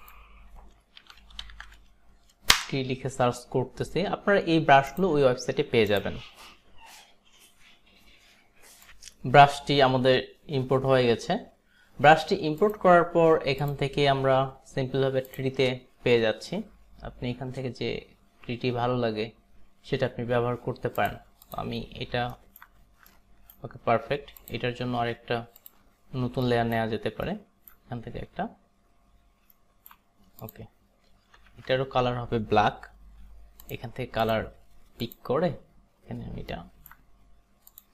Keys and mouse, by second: 0.8-1.9 typing, 2.6 Return, 5.0 click, 6.0 click, 8.9 click, 12.7 click, 13.7 click, 15.3 click, 21.0 click, 21.5 click, 22.7 alt+right click, 23.2 alt+right click, 24.4 click, 25.6 click, 26.5 alt+right click, 27.8 alt+right click, 29.6 alt+right click, 30.5 click, 31.6 ctrl+z, 34.3 click, 35.0 click, 36.6 alt+right click, 37.8 click.